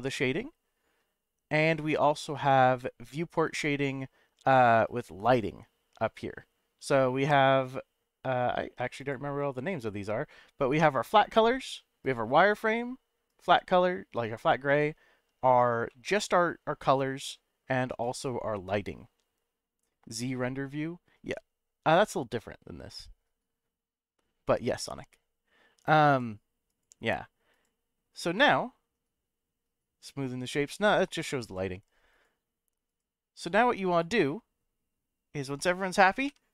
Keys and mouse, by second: 4.9 click, 9.0-10.2 drag, 10.9 click, 12.0 click, 13.3 click, 14.7 click, 15.9-16.9 middle drag, 18.0 click, 26.0 click, 26.7 click, 27.5 click, 28.3-30.6 middle drag, 31.4 click, 32.1 click, 32.9 click, 33.3 click, 33.9 click, 36.4 F12.